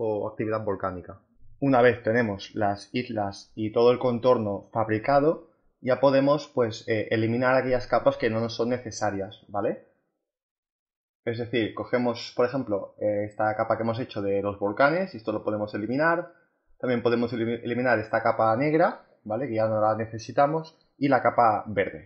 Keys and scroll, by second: 14.6 Delete, 18.5 Delete, 20.4 Delete.